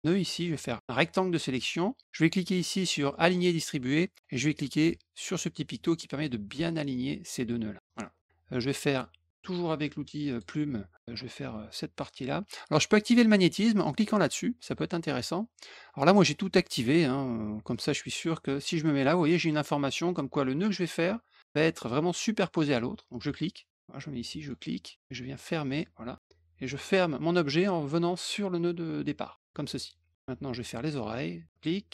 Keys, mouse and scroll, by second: 0.8 click, 3.2 click, 5.7 click, 10.2 click, 13.8 click, 14.6 click, 17.6 click, 23.1 click, 24.3 click, 25.6 click, 29.3 click, 31.5 click.